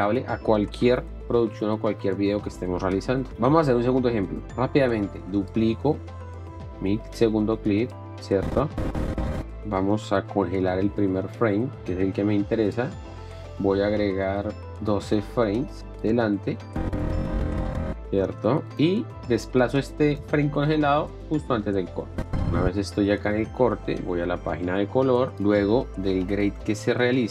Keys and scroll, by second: 9.5 Up, 10.5 r, 14.8 ., 15.0 KP_1, 15.2 KP_2, 15.4 Return, 16.7 Left, 25.7 F2, 26.1 g, 26.4 e, 27.2 BackSpace.